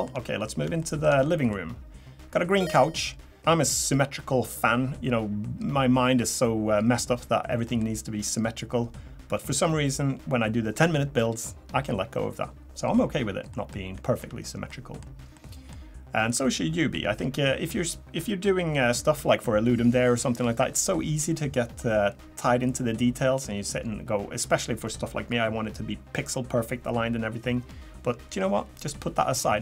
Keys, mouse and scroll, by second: 0.5 scroll up 2, 0.8 shift+middle click, 1.2 middle click, 2.9 middle click, 9.3 middle click, 13.5 middle click, 14.0 shift+middle click, 14.7 middle click, 15.3 middle click.